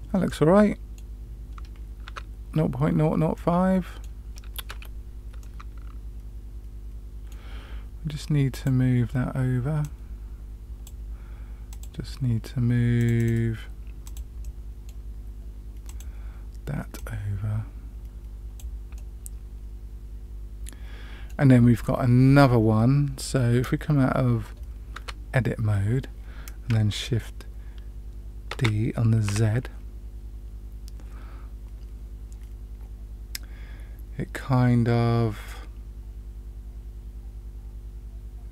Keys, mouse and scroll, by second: 5.4-7.3 middle drag, 8.5 click, 9.8-10.8 drag, 11.7 click, 12.9 click, 13.2 click, 14.0 click, 14.4 middle click, 15.8 click, 16.9-18.5 drag, 18.9-21.3 middle drag, 25.1 Tab, 28.6 shift+d.